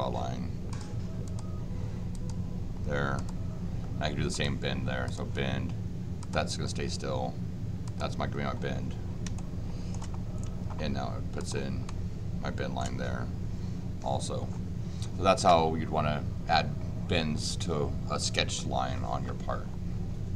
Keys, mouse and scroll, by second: 0.7 click, 1.2 click, 2.1 click, 3.1 click, 4.3 click, 5.0 click, 6.2 click, 7.8 click, 9.3 shift+middle click, 11.4 click, 11.8 shift+middle click.